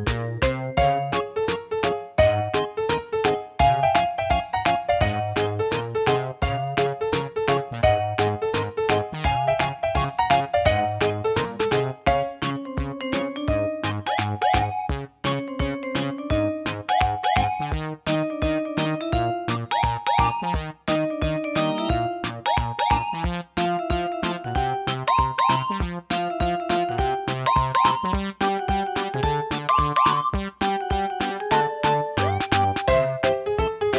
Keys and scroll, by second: 12.0 super+d, 17.9 super+d.